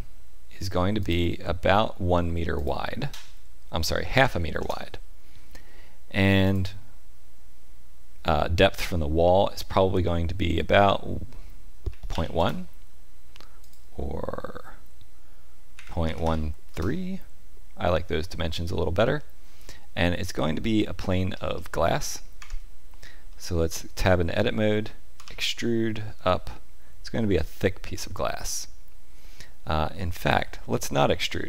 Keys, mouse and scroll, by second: 1.0 click, 2.5 click, 13.6 click, 19.0 middle click, 21.3-21.6 scroll up 2, 22.4 Tab, 22.4-22.8 scroll up 1, 23.3 middle click, 25.1 e.